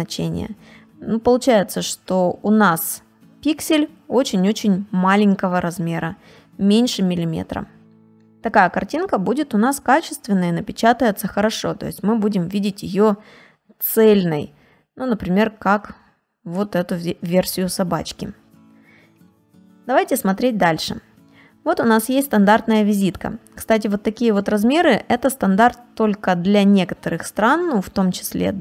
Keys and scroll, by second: 7.3 ctrl+space, 7.8 ctrl+space, 11.7 space, 16.4 space, 18.1 ctrl+space, 18.5 ctrl+space, 22.9 space.